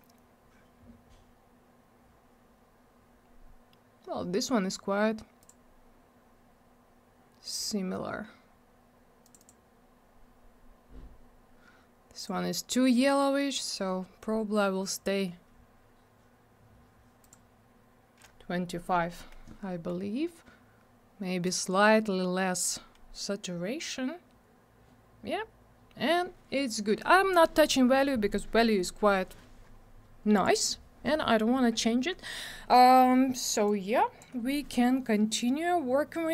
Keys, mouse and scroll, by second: 5.4 click, 9.2 click, 9.3 click, 9.4 double click, 12.1 click, 13.6 click, 17.2 click, 21.4 click, 30.3 click, 33.6 click.